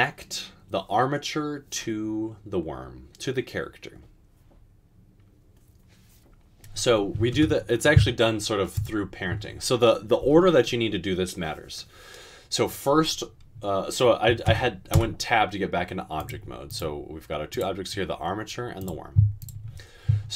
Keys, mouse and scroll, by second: 7.4 Tab, 14.5 Tab, 14.9 Tab.